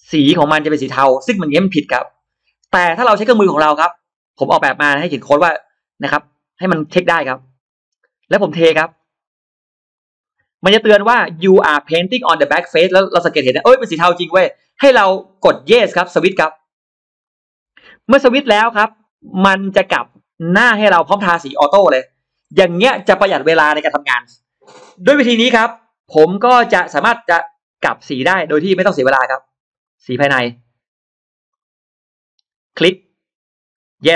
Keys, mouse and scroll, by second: 0.0-0.3 scroll up 1, 1.5 click, 2.2-2.5 scroll down 1, 3.9 click, 6.4 click, 7.2 click, 8.3 scroll down 2, 8.7 scroll up 2, 9.8 click, 17.1 click, 17.9-18.2 scroll down 2, 18.9 click, 19.6-19.9 scroll up 1, 19.7 middle click, 20.7 shift+x, 20.9-22.1 drag, 25.1 shift+right click, 25.2 shift+right click, 26.1 middle click, 26.2 scroll down 1, 26.4 click, 28.1 click, 29.2 click, 29.7 click, 30.2 click, 31.3 click, 32.6 click, 33.8 click.